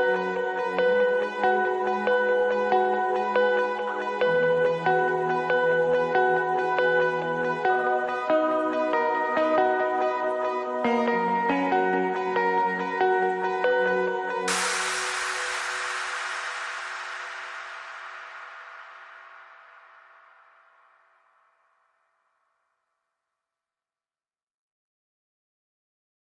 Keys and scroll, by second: 6.7 alt+w, 6.9 alt+F4.